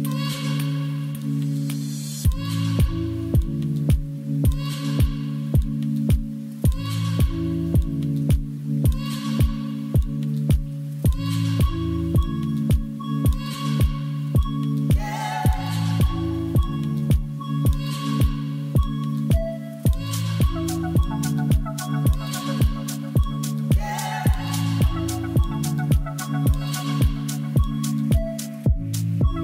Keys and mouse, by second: 0.0 middle click, 0.1 Tab, 1.4 2, 2.2 ctrl+b, 3.9 click, 4.8 g, 5.2 z, 6.3 Tab, 7.1 ctrl+s, 7.2-8.5 middle drag, 9.0 middle click, 10.4 click, 14.2 click, 15.0 click, 15.6 middle click, 16.1-18.4 drag, 19.4 click, 19.7 x, 19.8 click, 20.0 x, 20.4 shift+a, 22.8 Down, 22.9 Down, 24.6-25.2 drag, 26.0 ctrl+s, 26.6 middle click, 27.4 click.